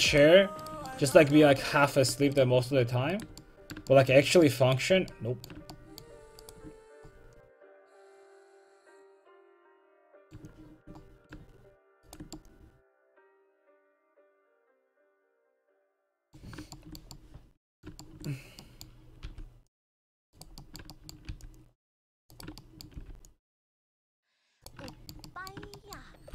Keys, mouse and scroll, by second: 0.2 middle click, 1.2-4.2 middle drag, 4.2 right click, 4.4 middle click, 6.5 right click, 7.4-9.0 middle drag, 11.0 middle click, 12.1-13.6 right drag, 13.6 middle click, 16.5 middle click, 17.2-18.5 middle drag, 19.3 c, 21.3 c, 23.1 c.